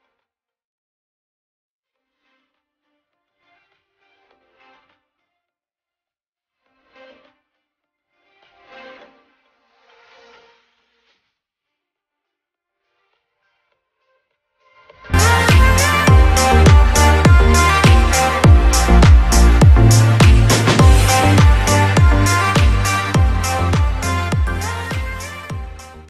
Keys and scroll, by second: 5.0 shift+space.